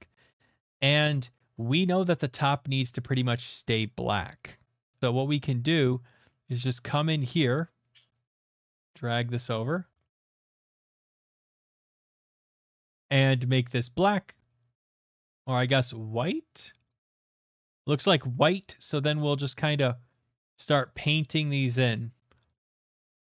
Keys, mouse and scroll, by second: 0.2 alt+right click, 1.0 alt+right click, 3.1 middle click, 3.4 shift+middle click, 3.8 middle click, 4.9 shift+middle click, 4.9 right click, 5.0 middle click, 5.1 middle click, 5.3 shift+middle click, 5.3 middle click, 5.3 shift+middle click, 5.9 middle click, 6.3 middle click, 7.6 middle click, 7.9 alt+middle click, 8.3 click, 8.9 click, 9.5 middle click, 9.7 middle click, 9.8 alt+middle click, 10.2 shift+middle click, 10.2 shift+middle click, 10.3 middle click, 10.6-12.5 shift+middle click, 10.9 right click, 11.2 middle click, 11.9 alt+right click, 12.2 click, 12.3 click, 12.4 middle click, 13.5 click, 14.2 click, 14.5 click, 15.3 alt+right click, 16.2 click, 16.9 alt+right click, 17.1 click, 17.3 click, 17.5 click, 18.1 click, 18.5 click, 19.5 right click, 20.5 alt+right click, 21.5 click, 22.1 click, 22.3-23.1 scroll.